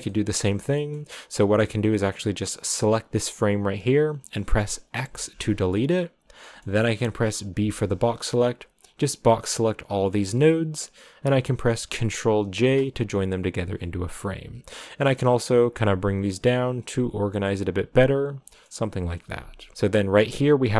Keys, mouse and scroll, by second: 0.0-1.1 middle drag, 1.1 scroll up 3, 2.3 click, 5.0 x, 5.6-7.9 middle drag, 7.9 b, 12.4 ctrl+j, 13.2 click, 13.6 click, 14.4 a, 14.7 click, 15.4 click, 16.2 click, 17.1 click, 17.9 click, 18.5 middle click, 19.4 click, 19.7 middle click, 20.4 click.